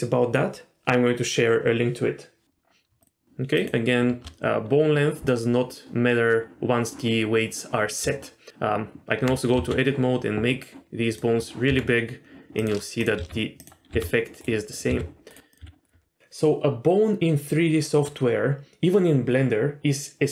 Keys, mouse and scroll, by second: 3.0 shift+click, 3.6 shift+click, 8.0 Tab, 9.5 s, 11.7 Tab, 13.0 click, 13.1 r, 13.6 click, 13.9 r, 14.7 click, 14.9 r, 15.5 click, 15.6 r.